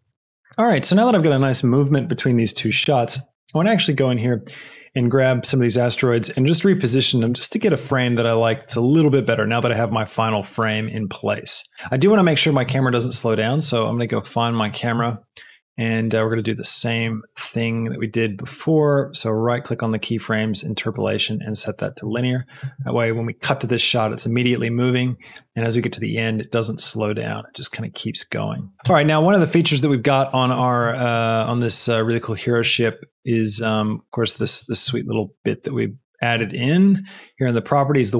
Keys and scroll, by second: 5.3 g, 5.5 x, 7.3 g, 7.9 r, 8.7 g, 13.0 space, 21.9 space, 28.9 space.